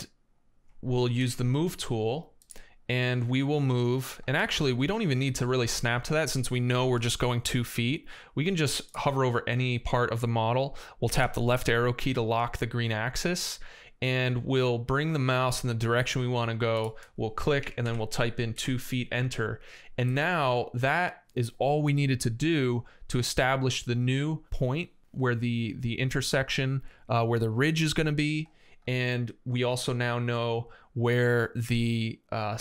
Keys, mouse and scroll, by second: 0.1 middle click, 1.0 m, 4.2 Escape, 10.9 Left, 17.2-18.1 typing, 18.4 Return, 20.5 middle click, 29.1 right click.